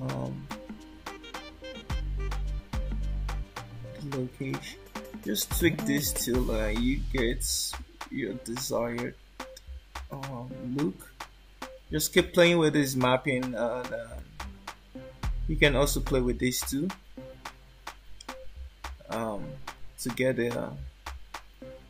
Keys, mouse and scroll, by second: 0.4 click, 7.2 click, 10.1 click, 14.1 shift+middle click.